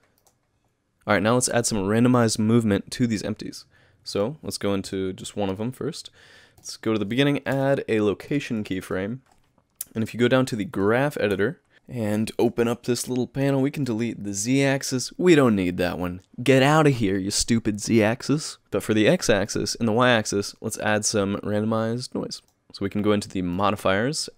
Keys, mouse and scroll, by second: 4.2 click, 4.9 KP_Decimal, 6.6 click, 7.5 i, 8.8 middle click.